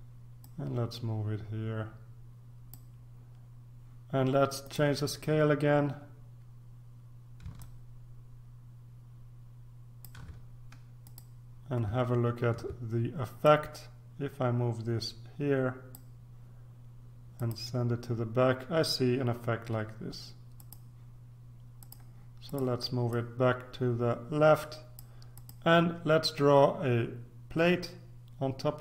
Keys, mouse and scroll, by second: 0.4-3.3 drag, 4.6 click, 7.6-10.6 ctrl+drag, 11.0 click, 12.1-12.8 ctrl+scroll down 2, 13.4-16.5 drag, 17.3 click, 20.5 click, 21.8-26.0 drag.